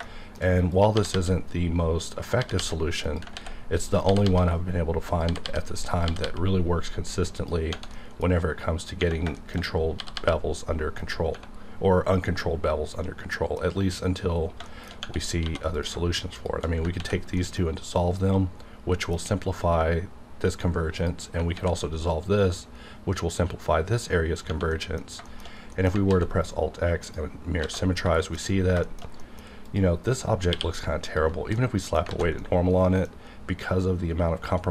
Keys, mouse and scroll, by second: 0.0 middle click, 0.4 shift+scroll down 1, 0.7 click, 1.0 g, 1.1 g, 2.1 click, 2.6 g, 3.0 click, 3.3 ctrl+x, 3.8 click, 4.1 g, 4.2 g, 5.1 click, 5.3 g, 5.4 g, 5.9 click, 6.1 g, 6.2 g, 7.4 click, 7.9 middle click, 9.4 shift+middle click, 9.6-10.0 scroll up 1, 10.0 g, 10.1 g, 11.0 click, 13.1 scroll down 1, 14.4 scroll down 1, 14.7 shift+middle click, 15.4 2, 15.7 click, 16.4 shift+click, 16.9 ctrl+x, 17.4 middle click, 17.5 scroll down 1, 17.8-18.6 scroll up 1, 18.9 middle click, 21.0 click, 21.5 ctrl+x, 22.1-22.9 scroll up 1, 24.2 scroll down 1, 24.7 middle click, 25.0 scroll down 1, 25.3 shift+middle click, 25.5 scroll down 1, 25.7 middle click, 26.1 alt+x, 27.0 click, 27.4-28.8 scroll down 5, 27.6 alt+a, 28.2 shift+middle click, 28.8 shift+middle drag, 29.7 shift+click, 30.5 shift+q, 31.3 alt+click, 31.6 middle click, 32.1 alt+a, 32.4 middle click, 33.1-34.7 scroll up 1.